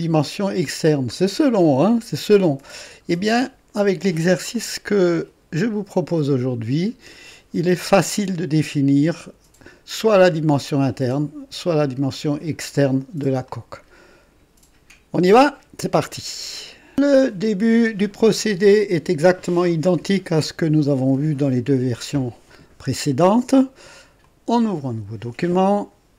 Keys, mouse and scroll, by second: 0.6-1.0 scroll down 1, 1.6 click, 2.7 scroll down 1, 3.3 right click, 4.5-7.5 drag, 8.2-9.7 drag, 13.5 click, 16.7 right click, 24.2 click.